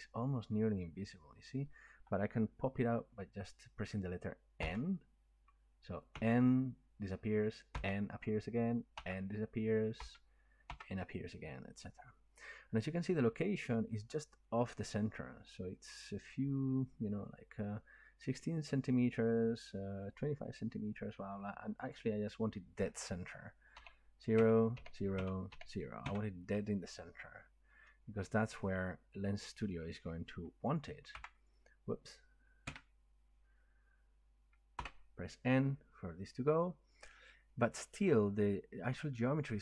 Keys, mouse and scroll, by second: 4.7 n, 6.1 n, 7.7 n, 9.0 n, 10.0 n, 21.9-25.5 drag, 23.8-26.0 typing, 24.4 Tab, 25.2 Tab, 27.0 click, 31.2 n, 32.6 Escape, 34.8 n.